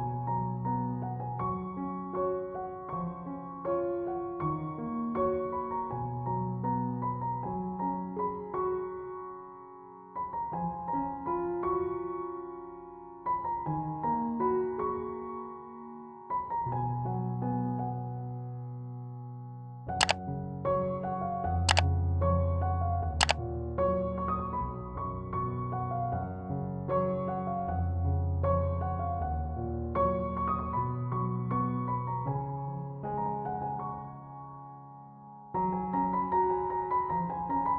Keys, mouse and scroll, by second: 5.2-28.3 drag, 29.3-37.7 drag.